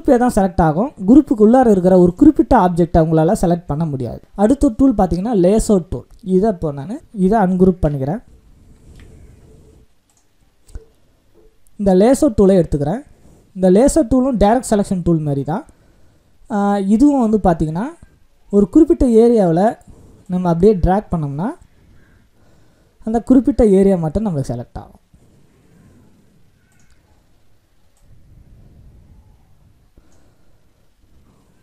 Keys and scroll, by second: 7.5 ctrl+shift+g.